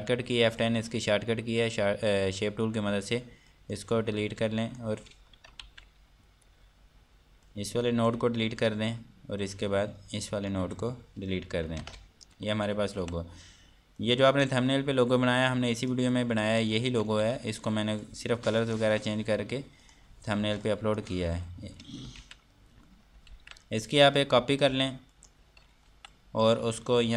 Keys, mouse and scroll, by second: 4.1 click, 4.5 Delete, 4.9 click, 7.0 scroll up 1, 8.7 Delete, 9.0 scroll down 1, 10.2 scroll up 1, 11.2 Delete, 11.7 scroll down 1, 12.4 ctrl+space, 12.7 scroll down 1, 12.9 Escape, 13.2 F3, 14.6 click, 15.3-15.7 scroll down 1, 15.9 click, 18.6 click, 20.4 click, 21.0 F2, 21.2 click, 21.8 Escape, 23.5 scroll down 1, 25.2 click, 25.7 right click, 26.5 F2, 26.7 click.